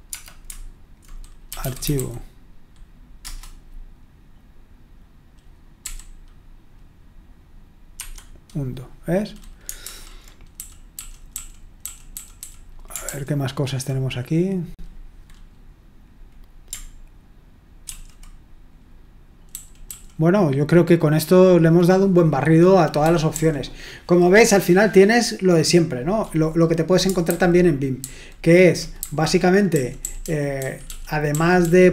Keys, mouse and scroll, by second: 0.0-0.1 typing, 1.3-2.5 typing, 3.2 Return, 5.8 u, 7.9 Escape, 9.8 super+l, 10.5-11.8 typing, 13.0 ctrl+u, 13.0 typing, 17.9 ctrl+w, 19.4-19.8 typing, 23.0 typing, 27.3 super+h, 27.9 super+h, 28.9-31.9 typing.